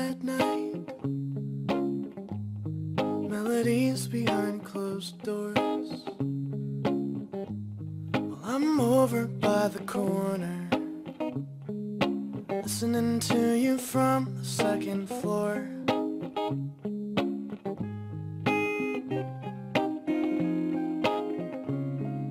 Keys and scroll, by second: 14.9 b.